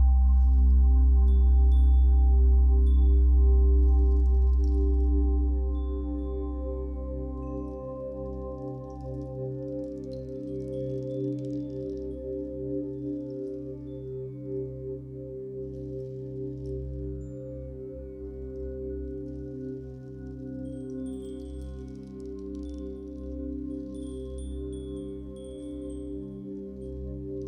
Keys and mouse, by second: 0.4-1.2 typing, 2.3-3.7 typing, 6.7-7.9 typing, 9.1 typing, 10.9-13.4 drag, 14.3 click, 16.8 click, 18.7 click, 18.9 click, 19.4 click, 19.6 click, 21.9 click, 23.0 click, 26.9 ctrl+s.